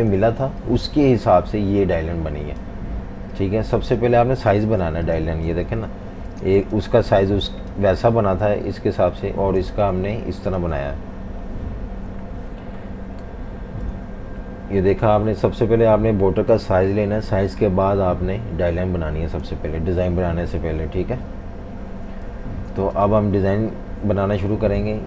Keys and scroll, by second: 0.0-1.7 typing, 4.6 super+g, 5.5 super+-, 5.6 super+-, 5.8 super+-, 6.3-7.7 typing, 9.6 typing, 12.1 F19, 13.8 F18, 21.4 F19, 22.3-22.7 typing.